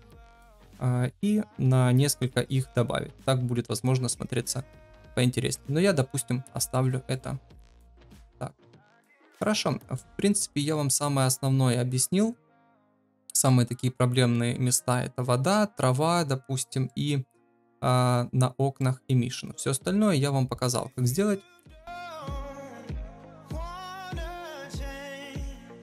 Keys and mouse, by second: 6.7-7.1 middle drag, 10.0-12.4 middle drag, 13.0-13.5 middle drag, 16.9 middle drag, 18.8-19.1 middle drag, 20.6-21.2 middle drag, 23.4 middle click, 24.1 shift+middle drag.